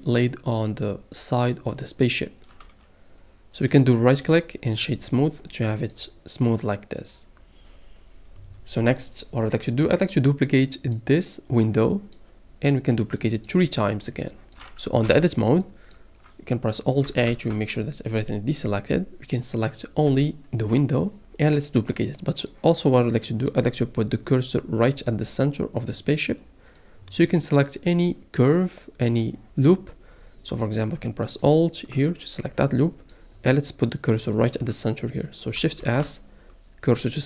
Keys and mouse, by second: 15.0 Tab, 17.3 alt+a, 20.1 l, 20.6 l, 25.8 middle click, 28.0-29.4 middle drag, 31.5 alt+click, 35.8 shift+s.